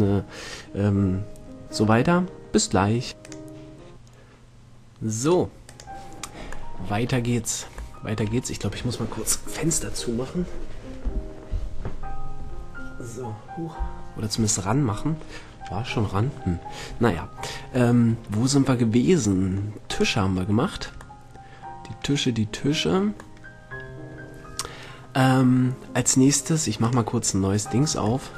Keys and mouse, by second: 6.1-7.2 drag, 7.2-12.7 middle drag, 18.4-20.2 middle drag, 20.4-21.6 right drag, 21.6 middle drag, 23.8-24.2 middle drag, 26.5 middle click, 27.8 click.